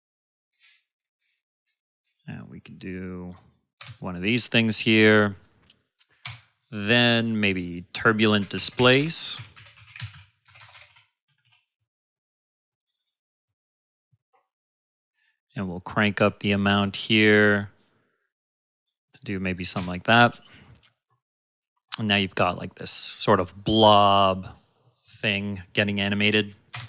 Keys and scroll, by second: 3.7 space, 6.2 space, 8.3-11.9 typing, 19.7 space, 26.7 space.